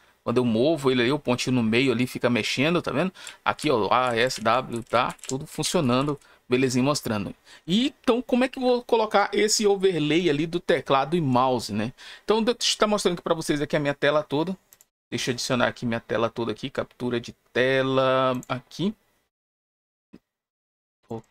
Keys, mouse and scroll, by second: 3.0-6.4 typing, 14.6 click, 18.2 click, 20.0-21.0 drag, 21.1 click.